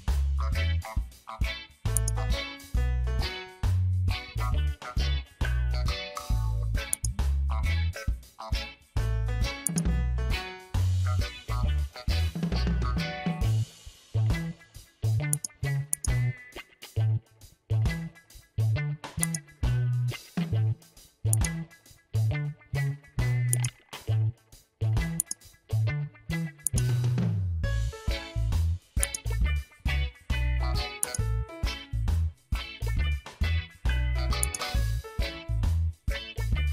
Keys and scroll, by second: 11.2 ctrl+g, 12.6 ctrl+j, 13.9 ctrl+e.